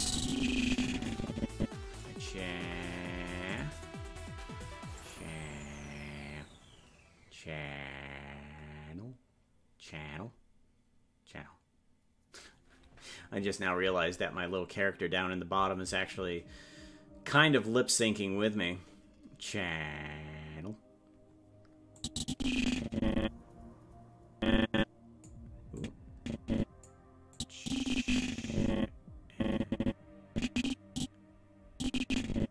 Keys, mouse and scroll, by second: 3.5 click, 5.0 click, 22.0-25.2 drag, 25.8-26.8 drag, 27.3-32.5 drag.